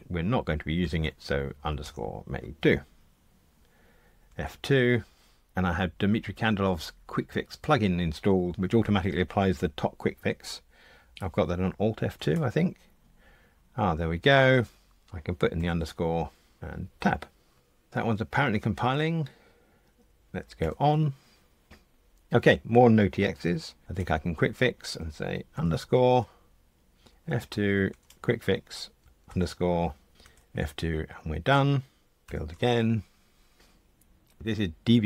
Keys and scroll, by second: 4.3 F2, 12.2 F1, 20.6 super+F9, 23.9 F1, 27.1 F2, 30.2 F2, 32.3 super+F9.